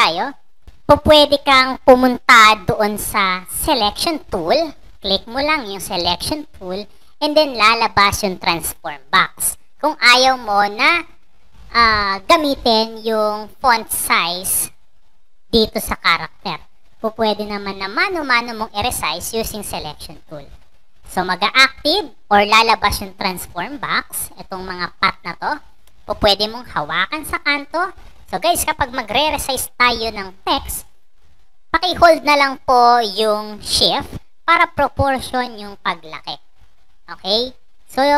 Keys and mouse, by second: 4.7 click, 27.5-38.1 drag.